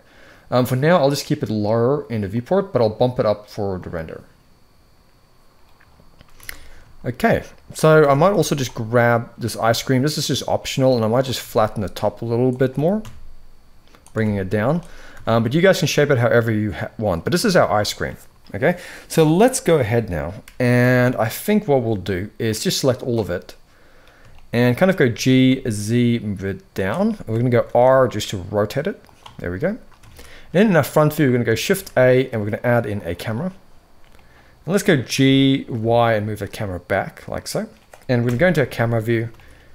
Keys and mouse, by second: 2.0 click, 3.5 click, 6.1 alt+a, 6.6 shift+middle drag, 7.7 Tab, 8.0 z, 9.3 click, 10.8 click, 11.1 s, 12.4 g, 13.8 Tab, 14.2 z, 14.9 alt+a, 16.3-16.8 middle drag, 17.1 shift+middle drag, 20.5 KP_1, 22.2 click, 24.0 shift+middle click, 24.8 g, 26.7 shift+middle drag, 27.3 r, 29.0 shift+middle drag, 29.8 alt+a, 30.3 shift+middle click, 31.4 shift+a, 33.8-34.5 middle drag, 34.8 g, 37.9 KP_0, 38.9 g.